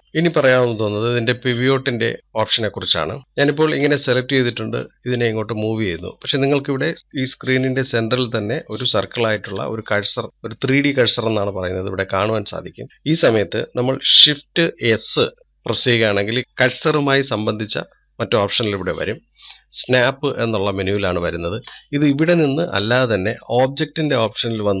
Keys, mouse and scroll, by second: 0.0-1.6 shift+middle drag, 1.6-2.3 scroll down 3, 2.9-3.3 scroll up 2, 3.6 click, 4.4 scroll down 1, 6.2 click, 7.0-10.4 scroll up 3, 10.4-24.8 shift+middle drag.